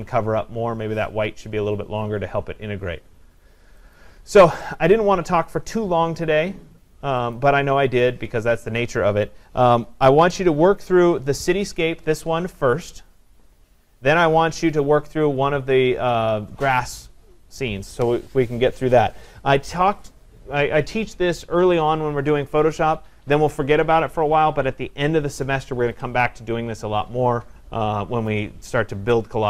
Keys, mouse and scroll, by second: 4.0 click, 7.4 click.